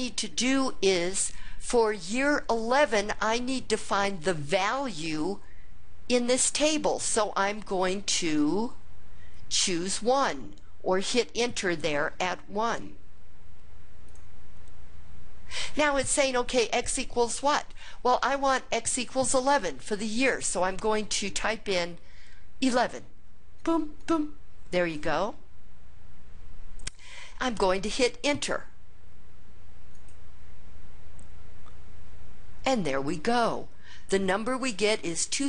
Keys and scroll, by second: 14.2 Return, 23.7 1, 24.1 1, 30.1 Return.